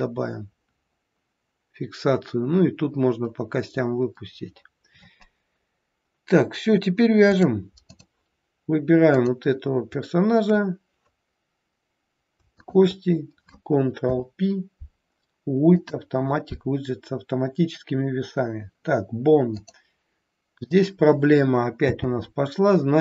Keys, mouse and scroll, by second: 5.5-6.1 scroll down 1, 7.3 click, 7.3-7.8 scroll down 1, 9.3 click, 12.6 shift+click, 13.9 ctrl+p, 19.5 click, 21.9 n.